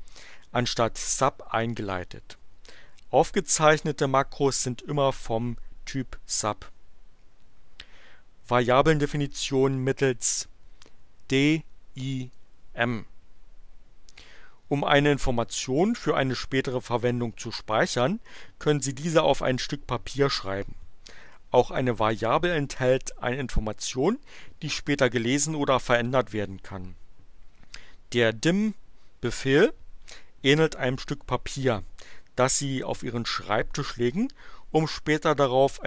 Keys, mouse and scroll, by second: 11.2-12.5 drag.